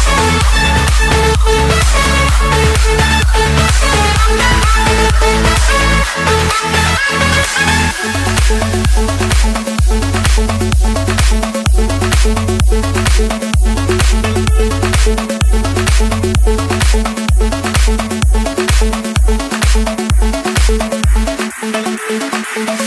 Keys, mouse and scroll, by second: 0.6 Escape, 2.8 click, 3.8 middle click, 4.7 middle click, 10.6-11.2 typing, 12.3 Return, 14.2-15.4 drag, 15.8-16.8 drag, 17.0 Return, 22.2 click.